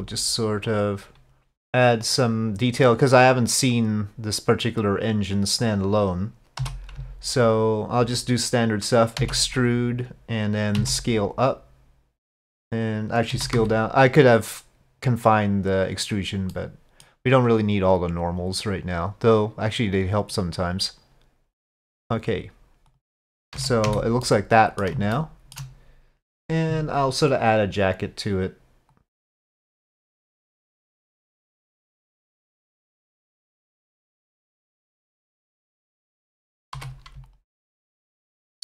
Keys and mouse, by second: 2.1 click, 3.5-4.6 drag, 5.4 click, 6.6 3, 9.2 e, 10.8 s, 13.4 s, 16.6 middle click, 18.3-20.4 drag, 20.7-22.4 drag, 23.0 click, 23.6 z, 24.3 middle click, 25.2 shift+middle click, 28.0 click, 28.9-32.0 drag, 32.4-33.5 drag, 34.3-35.7 drag, 36.3 click, 36.8 3, 37.3 alt+click.